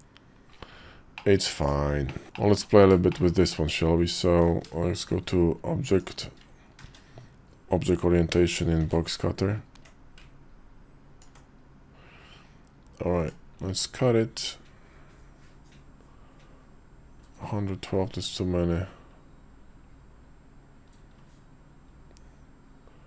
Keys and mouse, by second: 0.9 middle click, 1.8 middle click, 2.2 shift+middle click, 2.2 shift+`, 2.9 shift+middle click, 4.8 shift+v, 6.6 shift+v, 8.1 alt+w, 8.6 shift+v, 9.7 shift+middle click, 9.7 d, 11.0-23.0 ctrl+drag.